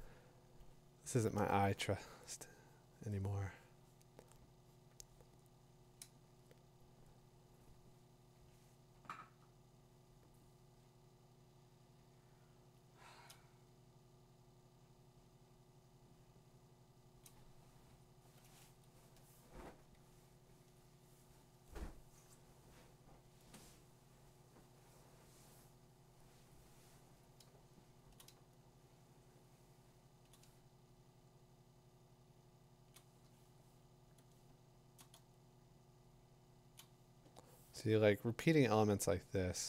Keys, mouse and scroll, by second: 0.6 ], 1.1 ], 2.0 ], 12.7 click, 17.2 click, 20.1 click, 20.7 click, 26.4 click, 27.2 click, 28.0 click, 28.1 click, 28.2 click, 28.8 click, 28.9 click, 29.4-29.7 click, 30.0 click, 30.2 click, 30.3 click, 31.0 click, 31.1 click, 31.6 click, 31.9 click, 32.0 click, 32.1-32.5 click, 32.2 click, 32.3 click, 32.7 click, 32.8 click, 34.9 click, 35.2-36.5 click, 35.7 click, 35.8 click, 35.8 click, 36.0 click, 36.6 click.